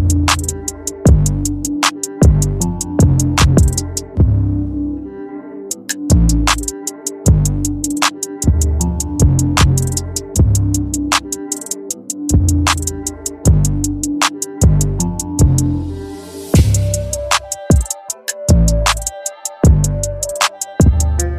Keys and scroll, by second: 10.4 ctrl+t, 13.7 Return, 15.3 ctrl+t, 19.4 Return.